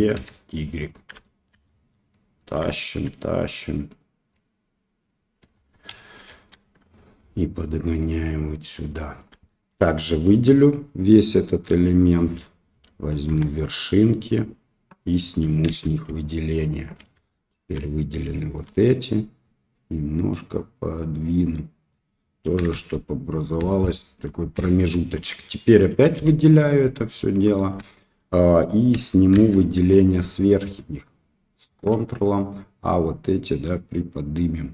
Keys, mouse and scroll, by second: 1.2 shift+middle click, 1.6 middle click, 2.6 shift+middle click, 3.5 middle click, 4.4-5.5 drag, 5.8 KP_1, 6.2 KP_3, 7.9 click, 9.4 shift+middle click, 11.6 l, 13.3 1, 15.6 shift+z, 16.2 ctrl+click, 17.2 shift+middle click, 18.3 shift+middle click, 19.4-21.9 drag, 22.7 shift+z, 23.7 shift+middle click, 24.5 shift+middle click, 26.1 l, 27.9 shift+middle click, 29.3 shift+z, 30.7 ctrl+click, 33.0-34.7 drag.